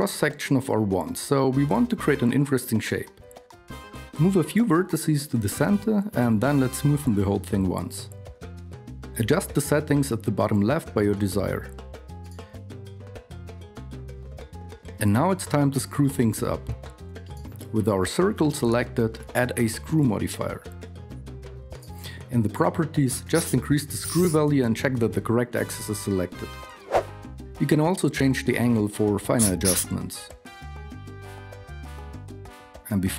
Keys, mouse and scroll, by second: 0.5 Tab, 1.8 g, 3.1 g, 4.1 g, 4.3 a, 5.0 g, 6.1 g, 7.0 a, 10.5 a, 16.2 Tab, 25.5 KP_1.